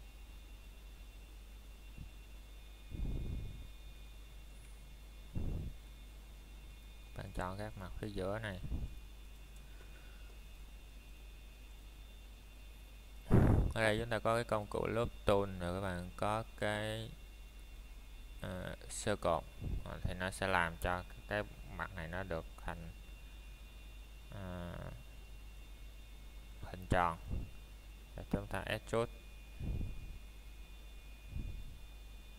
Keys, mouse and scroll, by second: 0.1 alt+shift+click, 2.2 middle click, 2.5 scroll up 1, 3.3 middle click, 3.7 scroll up 1, 4.3 o, 6.7 click, 7.0 scroll down 1, 7.1 middle click, 7.5 scroll up 1, 7.8 middle click, 8.6 scroll up 1, 9.0 middle click, 9.8 typing, 9.9 alt+click, 11.0 middle click, 11.6 scroll down 1, 21.0 middle click, 21.6 a, 22.8 ctrl+Tab, 23.9 click, 31.6-32.3 scroll down 1.